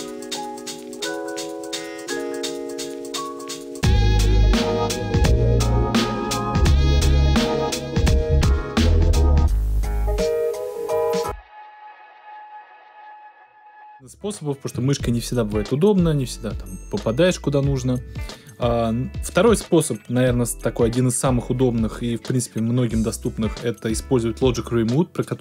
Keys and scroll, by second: 2.8 Return, 4.9 Left, 5.7 Right, 7.8 Return, 11.0 space, 11.7 super+space, 11.9 super+Return, 13.7 Left, 14.7 Right, 17.6 Left, 17.9 Right.